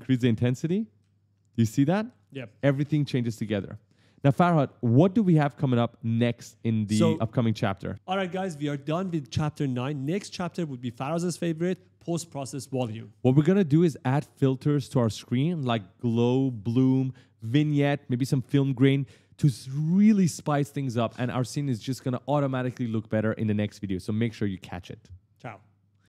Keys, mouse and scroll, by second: 0.3 right click, 0.3 d, 0.8 right click, 1.0 a, 1.6 right click, 1.7 right click, 1.9 right click, 3.3 ctrl+z.